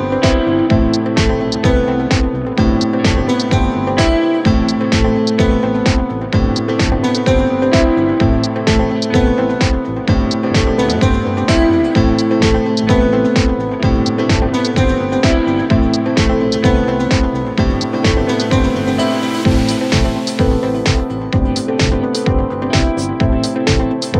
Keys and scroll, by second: 7.5 ctrl+z.